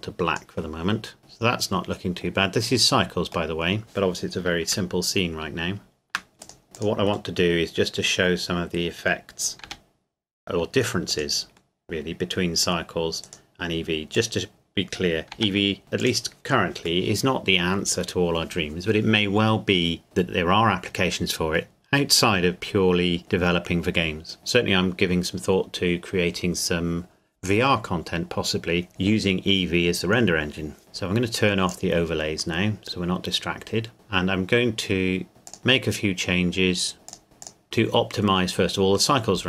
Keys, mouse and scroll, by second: 1.2 middle click, 5.2 shift+middle click, 6.3 scroll up 2, 6.4 click, 6.6 g, 6.8 click, 7.7 middle click, 9.6 g, 11.1 click, 11.8 middle click, 13.3 right click, 14.2 click, 15.3 g, 16.1 click, 17.0 middle click, 31.7 click, 35.3 click, 35.6-36.3 scroll down 1, 37.1 click.